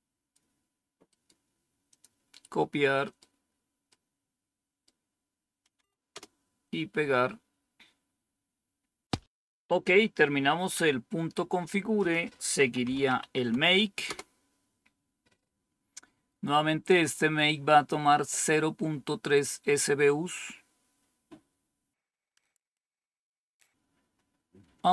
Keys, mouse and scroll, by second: 1.1 right click, 1.8 click, 5.6 Right, 6.0 Return, 9.2 click, 9.7 scroll up 1, 10.6 scroll down 1, 11.8 click, 12.4-13.6 typing, 13.9 Return, 22.4 click.